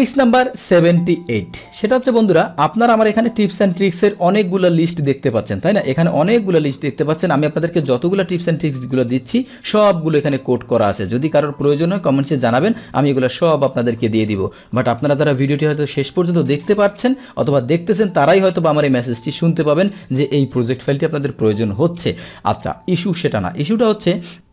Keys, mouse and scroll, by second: 2.6 alt+Tab, 3.4-7.7 scroll down 2, 8.4 Tab, 9.3-13.9 scroll down 2, 14.1-18.3 scroll up 1, 18.3-19.3 scroll up 1, 19.3-21.5 scroll up 1, 21.5 click, 24.4-24.5 drag.